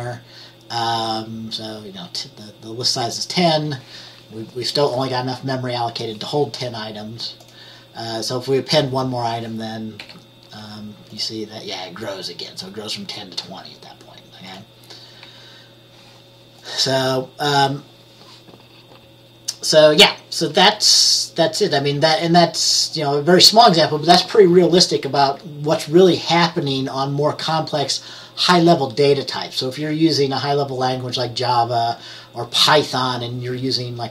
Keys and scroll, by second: 10.1 F10, 15.4 F10.